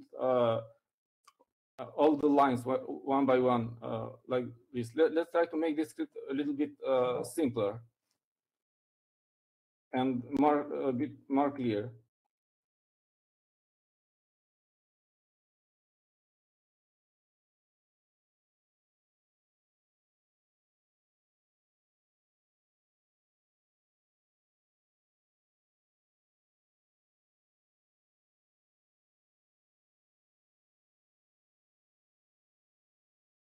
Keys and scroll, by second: 10.5 Up, 10.7 Up, 11.2 Up, 11.3 Down, 11.7 Down, 12.2 Down, 18.7-25.3 typing, 29.2-33.3 typing.